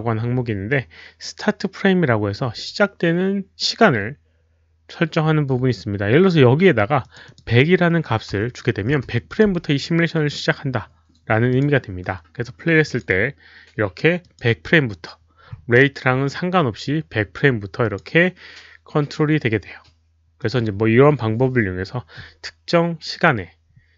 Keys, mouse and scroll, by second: 7.0 ctrl+a, 7.0 click, 7.2 click, 8.9 Return, 8.9 click, 11.5 click, 11.6 Return, 11.6 KP_1, 12.8 click, 14.2 Return, 14.2 click, 14.2 KP_1, 17.8 click, 17.9 Return, 17.9 KP_1, 20.4 click.